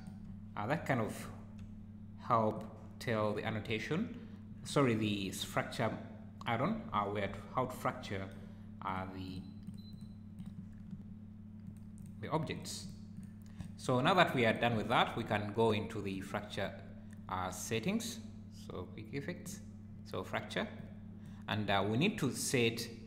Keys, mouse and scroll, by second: 0.3 `, 1.2 `, 2.5 click, 3.7 `, 6.9 `, 7.5 scroll up 3, 8.9 click, 9.3 click, 9.6 click, 9.9 click, 10.4 click, 10.7-11.3 scroll down 3, 11.6 click, 12.0 click, 12.5 click, 12.8 click, 13.1 click, 13.6 click, 14.3 click, 14.5 click, 14.8 `, 16.1 click.